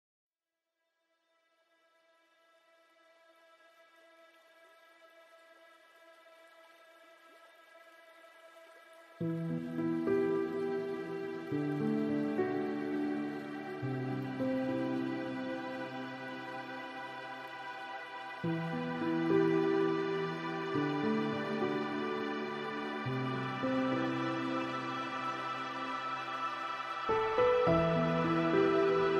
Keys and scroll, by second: 24.1 ctrl+shift+].